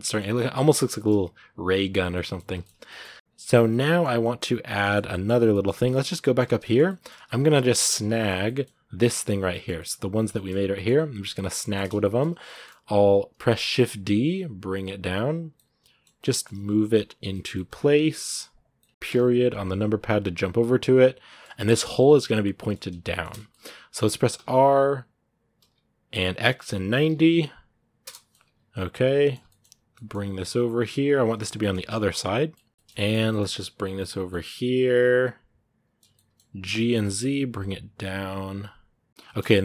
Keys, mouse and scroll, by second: 0.9 scroll up 2, 1.5 middle click, 2.4 shift+scroll down 1, 2.7 middle click, 3.1-3.5 scroll up 2, 3.5 middle click, 4.2-4.6 scroll down 1, 4.6 shift+middle click, 5.2-5.7 scroll down 2, 5.3 shift+middle click, 5.7-9.1 shift+middle drag, 9.1 right click, 9.3 shift+middle click, 10.3 scroll up 1, 10.5 middle click, 11.1-11.8 scroll down 3, 11.4 shift+middle click, 11.8 shift+middle click, 12.2 scroll down 1, 12.3 shift+middle click, 12.8-13.5 scroll down 1, 13.5 shift+d, 15.3-16.4 middle drag, 16.4 g, 17.1 shift+middle click, 17.6 g, 18.6 middle click, 18.9 KP_Decimal, 20.2 scroll down 2, 20.4-22.2 middle drag, 22.2 scroll down 3, 22.4-24.1 middle drag, 24.1 r, 28.1-29.4 middle drag, 29.4 scroll up 1, 29.7 g, 31.2 middle click, 31.3 g, 32.7 shift+middle click, 33.0 g, 34.1-36.5 middle drag, 36.5 g, 39.2-39.6 middle drag.